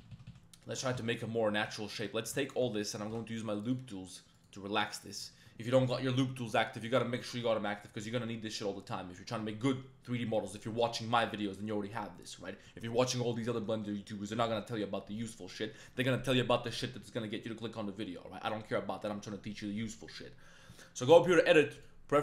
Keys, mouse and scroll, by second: 0.0 ctrl+z, 0.1 ctrl+z, 0.3 ctrl+z, 1.0 ctrl+z, 1.5 2, 2.0 click, 2.4 alt+click, 3.1 w, 5.0 click, 7.3-9.5 drag, 21.9 click.